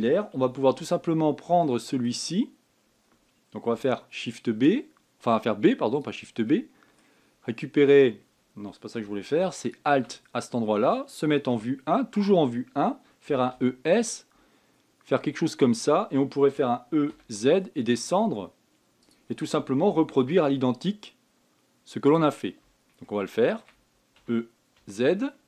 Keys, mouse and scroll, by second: 1.2 shift+middle click, 1.8-2.4 scroll up 6, 2.4 shift+middle click, 2.8 shift+scroll up 1, 3.1 scroll down 2, 4.5 b, 7.2 middle click, 7.9 scroll up 3, 9.7 a, 10.3 alt+click, 12.2 KP_1, 12.6 scroll down 2, 14.0 e, 17.3 e, 20.9 s, 23.8-24.9 shift+middle drag, 24.9 e.